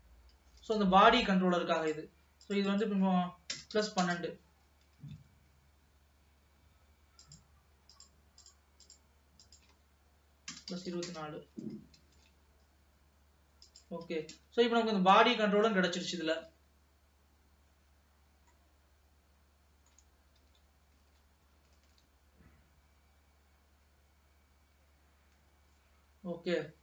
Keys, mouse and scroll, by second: 0.7 ctrl+s, 1.0 space, 1.3-5.1 drag, 5.1 shift+d, 8.0 click, 9.0-12.0 drag, 12.2 shift+d, 14.2 ctrl+s, 14.9 space, 15.2 space, 16.0 space, 17.1 ctrl+s, 18.7-20.4 middle drag, 20.4 alt+a, 21.1 ctrl+s, 21.9 ctrl+s.